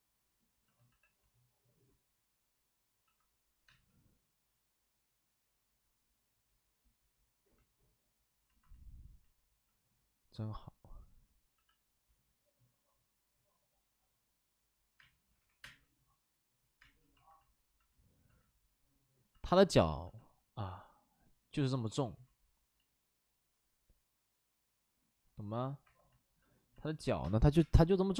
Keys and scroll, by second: 0.8 c, 3.0 c, 3.6 space, 10.2 c, 11.5 c, 14.9 space, 15.5 3, 15.6 space, 16.8 space, 21.8 w, 25.8 2, 27.1 3, 27.1 space, 27.5 3, 27.5 space.